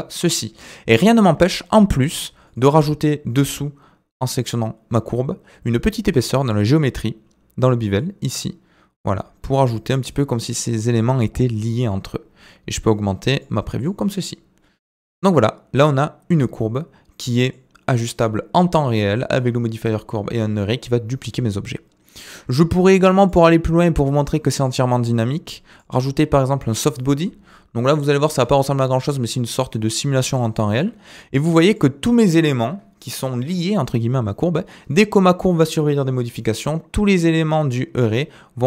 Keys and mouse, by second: 0.6 middle click, 2.4 click, 4.4 click, 6.4 click, 8.1-9.9 drag, 12.9 click, 13.8 click, 14.2-17.5 middle drag, 23.2 click, 25.7 click, 26.7 click, 27.9 middle drag, 28.2 space, 30.4 shift+middle click, 31.1-31.5 middle drag, 31.7 click.